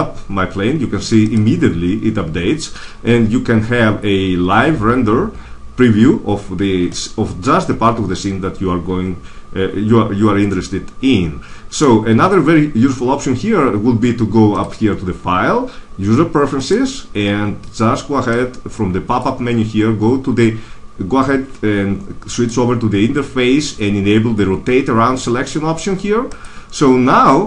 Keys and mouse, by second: 1.3 click, 1.5-2.8 drag, 3.0 click, 14.4-16.4 drag, 18.6 typing.